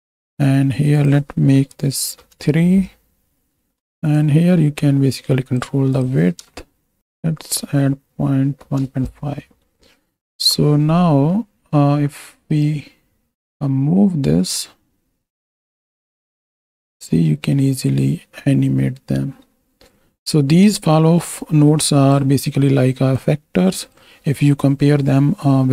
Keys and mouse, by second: 0.2 click, 1.1-2.2 drag, 4.2-5.7 shift+drag, 5.9-8.7 drag, 10.4 KP_7, 11.4 middle click, 14.5-22.3 drag, 23.3 click.